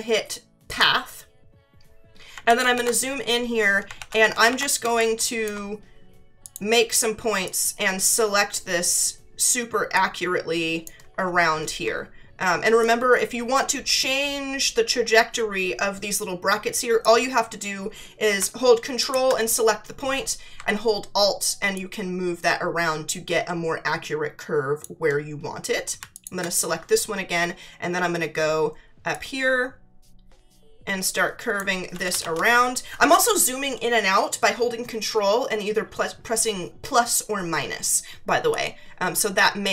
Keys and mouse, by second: 0.7 click, 2.4 ctrl+=, 3.9 ctrl+=, 4.8 space, 4.9 click, 6.4 click, 9.9 click, 12.8 click, 19.0 ctrl+click, 21.7 alt+click, 26.1 ctrl+click, 29.1 click, 38.5 click.